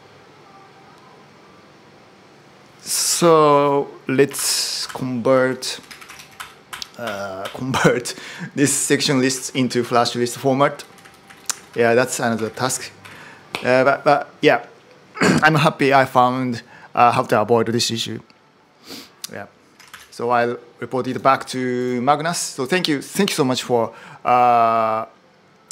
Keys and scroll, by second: 4.1 ctrl+u, 4.6 ctrl+u, 4.8-6.3 typing, 6.5 ctrl+u, 6.8 ctrl+u, 7.8 j, 8.0 j, 9.3 ctrl+d, 9.5 ctrl+d, 10.2-13.4 typing, 19.7 ctrl+shift+super+m.